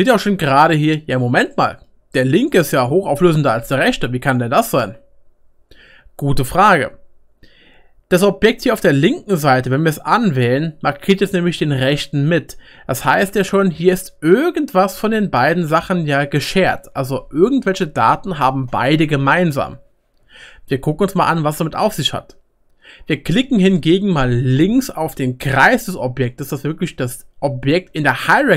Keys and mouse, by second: 0.8-28.5 shift+right drag.